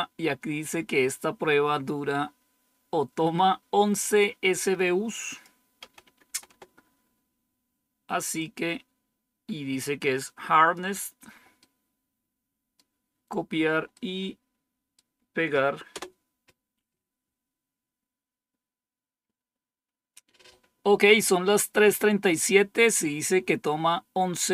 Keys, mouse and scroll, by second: 5.2 click, 5.7 BackSpace, 6.0 BackSpace, 6.2 BackSpace, 6.4 BackSpace, 8.3-10.7 drag, 11.5-13.4 right drag, 13.9-15.1 right drag, 15.8 Return.